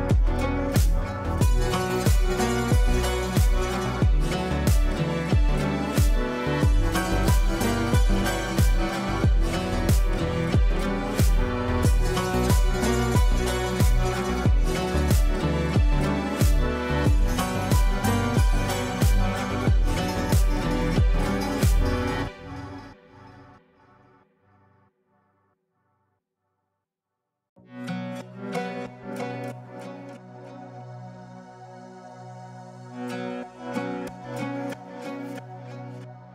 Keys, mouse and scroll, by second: 7.5 click, 14.1 F2, 14.6-16.7 drag, 18.5 Caps_Lock, 19.2-21.0 typing, 21.3 ctrl+space, 23.2 click, 27.9-33.7 drag, 34.5 shift+click, 35.3 c, 35.7 click.